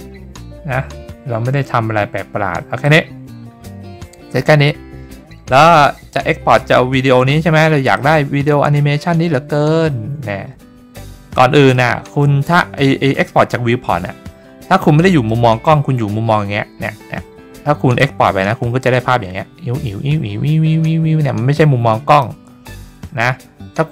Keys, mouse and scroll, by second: 0.0-1.2 scroll down 4, 1.8 middle click, 1.8 scroll up 2, 2.8 click, 7.9-10.9 drag, 11.7-12.3 middle drag, 12.6-13.0 scroll down 3, 15.2-17.0 middle drag, 18.0-22.2 drag.